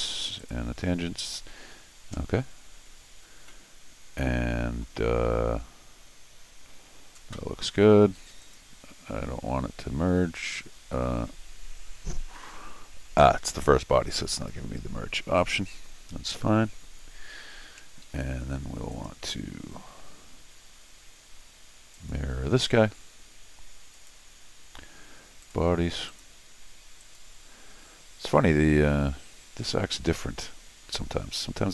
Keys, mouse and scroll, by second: 0.4 click, 3.5-4.8 middle drag, 8.4 click, 14.3 click, 18.0 Escape, 18.9 click, 21.9 click, 23.9 click, 25.4 click, 26.1 click, 27.0 click.